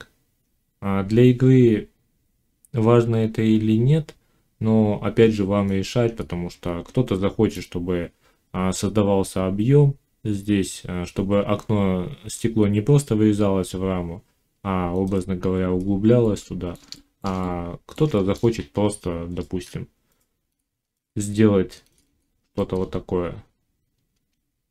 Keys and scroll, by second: 18.7 Tab.